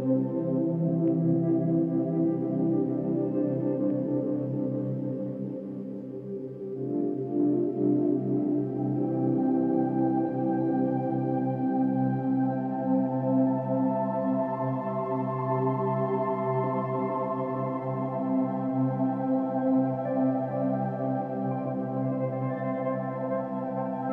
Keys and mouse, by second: 1.9 /, 3.5 /, 8.1 click, 9.0 shift+click, 9.5 shift+click, 11.5-12.0 typing, 12.5 click, 13.2 shift+click, 13.4 shift+click, 14.6 typing, 15.1 click, 16.0 shift+click, 16.2 shift+click, 19.4-19.9 typing, 20.2 click, 22.7-24.1 drag.